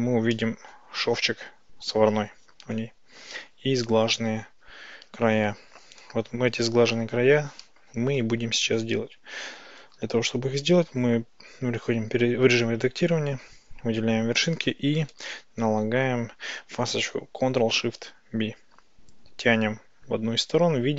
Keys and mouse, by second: 0.4 click, 0.4 middle click, 9.7 Tab, 11.4 a, 15.2 ctrl+shift+b.